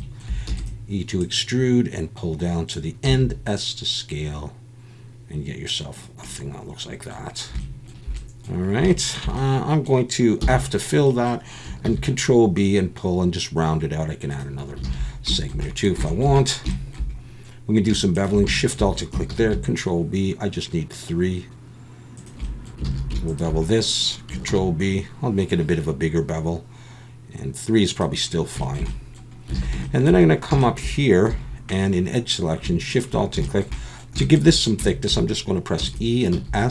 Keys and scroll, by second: 0.5 e, 3.1 s, 10.4 f, 11.8 ctrl+b, 14.8 alt+a, 19.3 ctrl+b, 22.8 alt+a, 24.5 ctrl+b, 29.6 alt+a, 31.3 2, 35.8 e, 36.3 s.